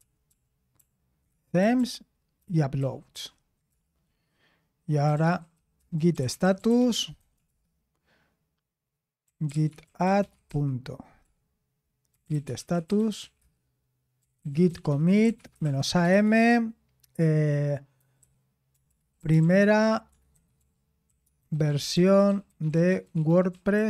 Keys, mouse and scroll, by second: 0.0-1.8 typing, 2.4 ctrl+p, 2.8 ctrl+p, 5.7-8.0 typing, 9.0-16.6 typing, 18.0-23.8 typing.